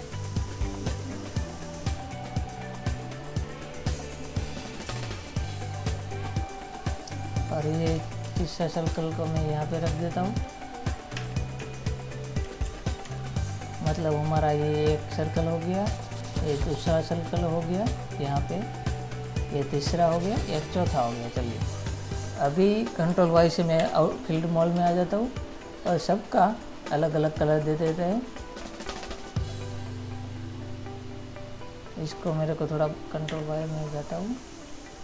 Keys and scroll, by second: 8.5 ctrl++, 9.2 space, 11.4 Right, 12.9 ctrl+-, 22.7 ctrl+-, 24.0 ctrl+y, 24.8 ctrl++, 33.5 ctrl+y.